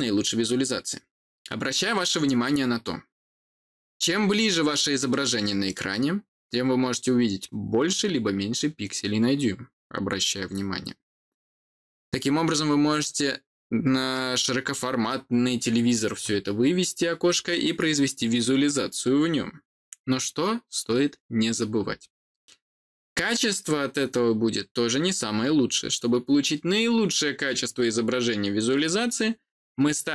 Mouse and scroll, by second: 3.7-4.5 scroll up 2, 4.5-5.0 scroll down 1, 5.0 middle click, 7.3 scroll down 1, 8.0-8.5 scroll down 1, 8.5-9.8 scroll up 1, 9.8-10.3 scroll down 2, 10.3-11.1 scroll up 1.